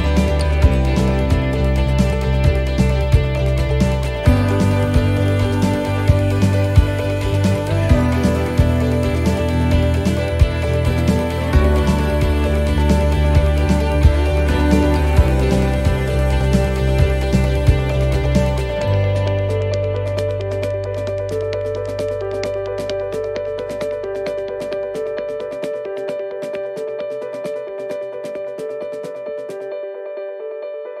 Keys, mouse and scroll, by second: 6.2 middle click, 6.2 x, 7.0 shift+middle click, 7.5 middle click, 8.1 shift+middle click, 8.5 scroll up 3, 8.7 scroll down 1, 9.5 middle click, 9.5-10.2 shift+scroll up 3, 11.0 middle click, 13.9 shift+middle click, 19.3 click, 19.9 middle click, 21.0 scroll up 2, 21.3 middle click, 23.0 middle click, 26.7 shift+middle click, 27.2 scroll up 2.